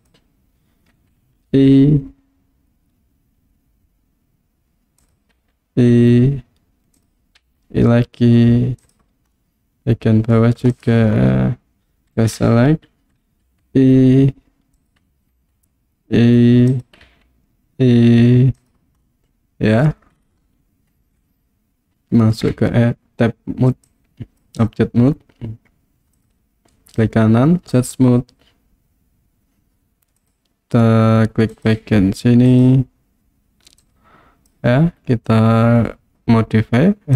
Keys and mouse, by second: 0.1 click, 1.7 i, 5.0 click, 5.4 i, 7.0 click, 7.4 i, 8.8 click, 9.5-10.3 middle drag, 13.5 i, 14.8 click, 15.4 i, 16.7 click, 18.6 click, 19.1-19.9 middle drag, 22.6 Tab, 23.9 click, 26.2 click, 26.7 right click, 30.3 click, 31.5 click, 32.5 click, 33.9 click.